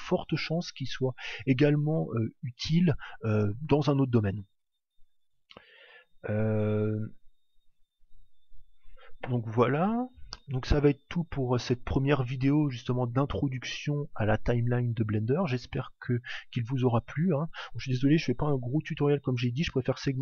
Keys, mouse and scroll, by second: 12.8 click.